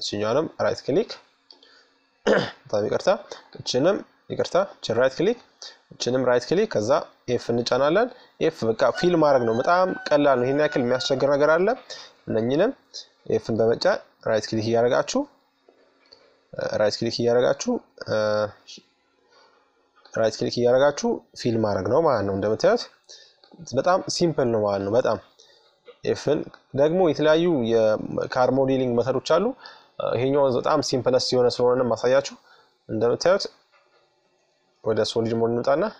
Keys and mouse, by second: 2.1-6.0 right drag, 5.9 f, 7.3-8.6 middle drag, 9.4-12.4 right drag, 11.7 f, 13.0-14.8 right drag, 14.4-16.1 drag, 15.3 right click, 16.1-17.2 middle drag, 18.6-20.2 right drag, 20.2 f, 20.3 right click, 22.0-25.1 right drag, 24.2 f, 25.5-28.6 right drag, 27.3 f, 28.7-31.7 middle drag, 32.5-34.3 drag, 34.6-35.9 middle drag.